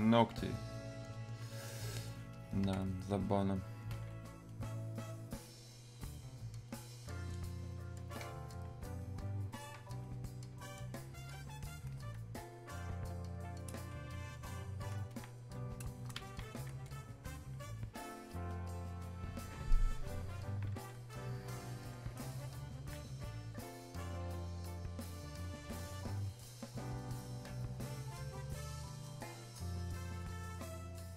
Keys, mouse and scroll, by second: 17.4-25.4 alt+drag, 26.0-31.1 drag.